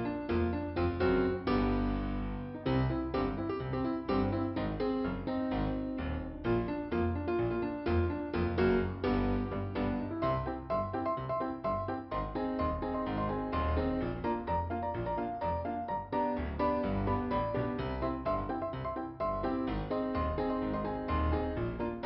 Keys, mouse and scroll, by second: 6.9-7.5 scroll up 2, 8.4 click, 9.3-9.9 scroll down 2, 11.4-12.5 scroll up 2, 12.7 click, 17.7 click, 18.1 scroll down 2.